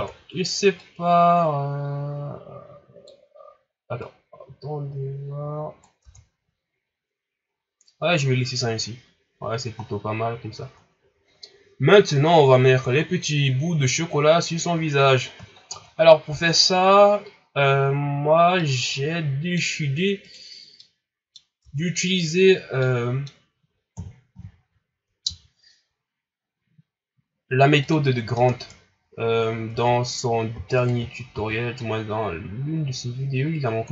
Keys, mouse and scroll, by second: 0.7-3.8 drag, 4.0 right click, 6.0 Tab, 6.4-6.8 scroll down 3, 6.8 scroll up 4, 8.0-8.7 scroll down 4, 8.7-9.8 scroll up 3, 9.8-10.2 scroll down 1, 10.2 scroll up 2, 10.8 scroll down 2, 14.7 scroll down 3, 15.6 shift+scroll down 4, 16.5-18.0 scroll up 1, 18.0 shift+scroll up 4, 18.6-19.8 middle drag, 19.8-20.2 scroll up 1, 20.2 right click, 20.8-21.6 middle drag, 21.6 Tab, 22.8-23.9 middle drag, 23.9 KP_1, 24.2-24.5 scroll up 1, 24.5 shift+scroll down 1, 25.2 s, 28.2 scroll down 1, 28.4 Tab, 29.1-29.7 scroll up 2, 29.7 Tab, 30.7 alt+right click, 31.3 s.